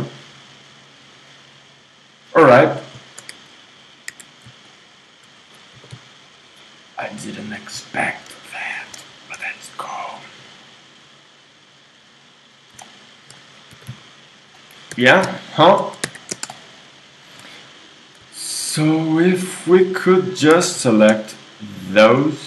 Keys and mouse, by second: 4.1 KP_1, 5.7 g, 8.0 middle click, 9.3-11.7 drag, 11.7-12.8 right drag, 12.8 middle click, 13.8 right click, 13.8 g, 14.9 KP_3, 16.1 KP_1, 18.4-20.5 drag, 20.5 ctrl+Tab, 20.9-22.4 drag.